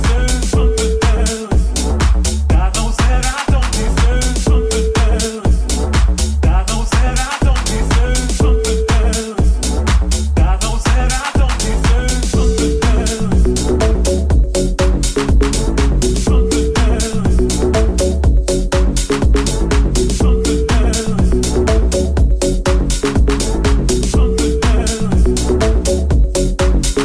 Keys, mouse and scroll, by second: 0.6 Tab, 1.6 shift+a, 16.7 s, 18.4-27.0 middle drag, 18.4 s, 18.4 e, 19.1 r, 22.7 s, 24.4 click, 26.2 g.